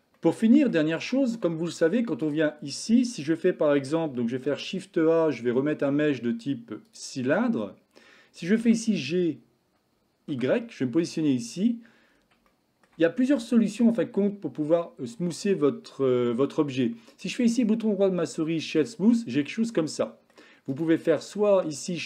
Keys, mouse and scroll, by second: 0.3-0.7 middle drag, 1.1-1.5 shift+middle drag, 2.1 click, 4.5 shift+a, 8.6 g, 12.5-12.9 shift+middle drag, 17.7 click, 17.9 right click, 19.4-20.4 middle drag, 20.8-22.0 right drag.